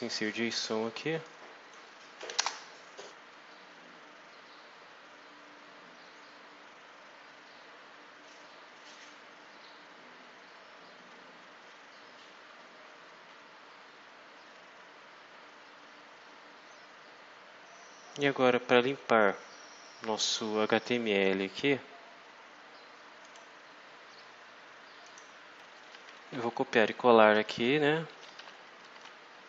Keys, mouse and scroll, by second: 1.2 click, 2.1 Delete, 2.3 Return, 4.3-4.8 scroll down 2, 5.1-5.6 scroll down 2, 6.3-7.0 scroll down 2, 7.3-7.8 scroll down 2, 8.1-8.4 scroll down 2, 8.6-9.1 scroll down 2, 9.4-10.2 scroll down 4, 10.6-11.1 scroll down 2, 11.3-11.8 scroll down 2, 11.9-13.6 scroll up 8, 13.7-14.1 scroll up 2, 14.4-14.8 scroll up 2, 17.0-17.5 scroll down 2, 18.4-18.7 scroll down 2, 18.9-19.8 scroll down 4, 20.3-20.7 scroll down 2, 23.2 click, 25.0 click, 25.6 Return, 27.3 ctrl+v, 28.0 ctrl+Up, 28.3 ctrl+Home, 28.9 Tab.